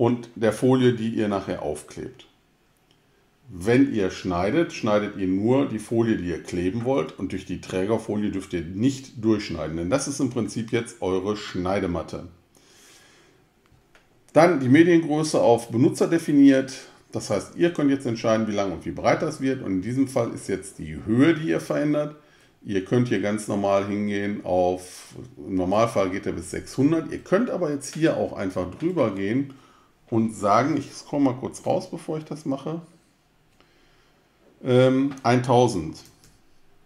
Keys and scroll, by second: 35.7-36.8 typing.